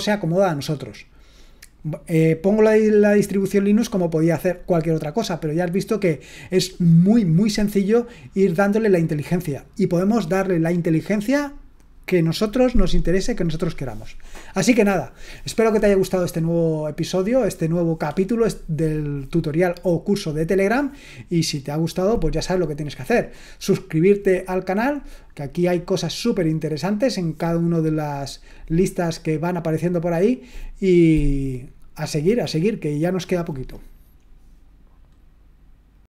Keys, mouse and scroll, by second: 35.9 click.